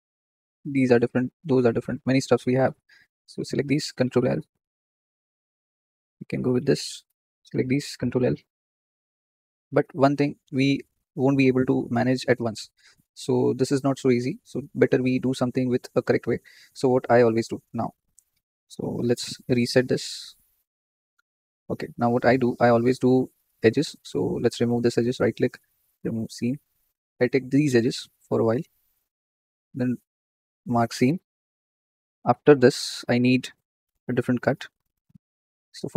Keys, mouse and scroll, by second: 0.1 click, 0.9 ctrl+z, 1.2 ctrl+z, 1.3 ctrl+z, 2.1-2.6 drag, 3.2 click, 4.1 ctrl+l, 4.4-4.9 scroll down 3, 4.9 g, 7.3 click, 8.0 ctrl+l, 8.8 g, 11.4-11.9 ctrl+z, 12.7 click, 21.1-23.9 drag, 24.6 alt+shift+click, 25.2-27.0 right drag, 27.0 click, 28.8 alt+shift+click, 31.0 right click, 31.6-35.9 middle drag.